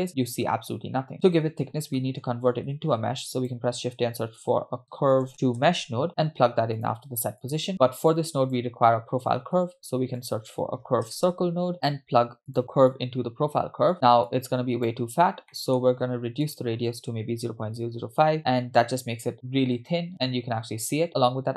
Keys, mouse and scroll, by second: 1.1 click, 2.0 middle click, 2.4-2.7 scroll up 2, 3.0 shift+a, 7.5 click, 7.7 middle click, 8.1 click, 9.6 shift+a, 12.9-13.9 drag, 14.3 click, 15.5 middle click, 16.5-18.4 drag, 18.3 0, 19.3 click, 20.1 scroll up 3, 20.4-21.0 scroll down 3.